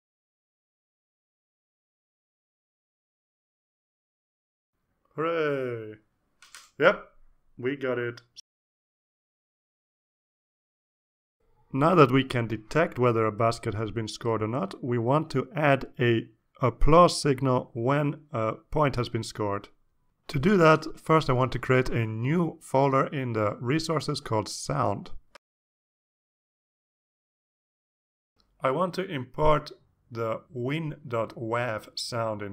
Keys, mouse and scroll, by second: 5.1 click, 5.7 click, 6.4 click, 7.1 click, 9.7-10.6 drag, 26.6 right click, 27.9 click, 30.2-32.1 typing.